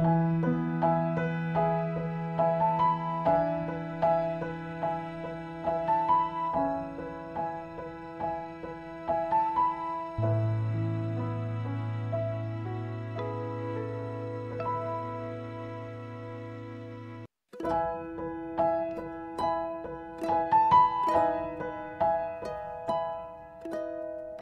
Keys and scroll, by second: 0.0-4.8 typing, 11.4 4, 11.8 Return.